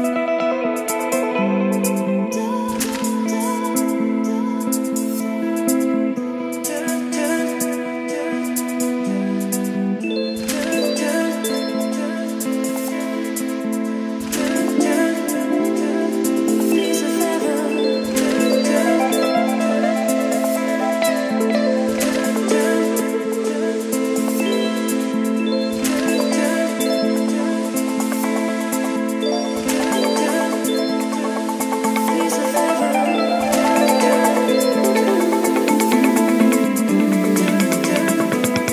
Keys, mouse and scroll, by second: 1.5-9.7 drag, 9.7-20.7 typing, 14.1 Return, 21.9 Down, 22.2 Return, 23.2 -, 27.3 Right, 30.7-33.1 typing, 34.4 Right, 34.9 Return, 36.0-37.9 typing.